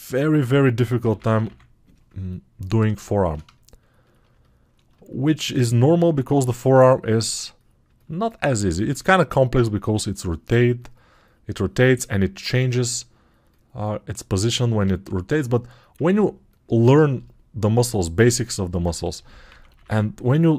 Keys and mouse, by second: 1.3 [.